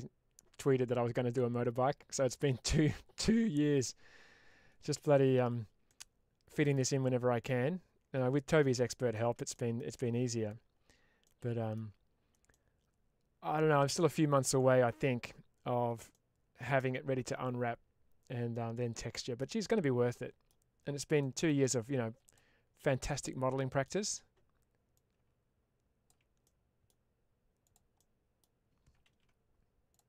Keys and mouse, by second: 5.7 middle click, 7.3-9.0 middle drag, 9.4 shift+middle click, 11.1 middle click, 12.4-15.1 middle drag, 16.0 shift+middle click, 18.4 middle click, 20.0 middle click, 21.1 middle click, 22.1 click, 22.9 middle click, 24.8-25.9 ctrl+drag, 26.3 middle click, 27.6 click, 27.8 middle click, 29.0 ctrl+z.